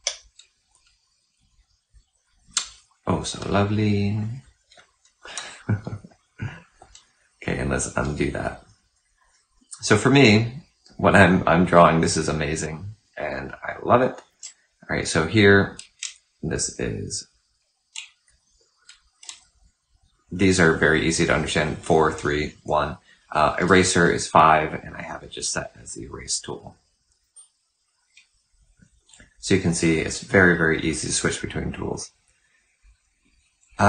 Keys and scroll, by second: 7.5 ctrl+z, 11.3 ctrl+z, 14.2 3, 23.5 5, 27.0 1.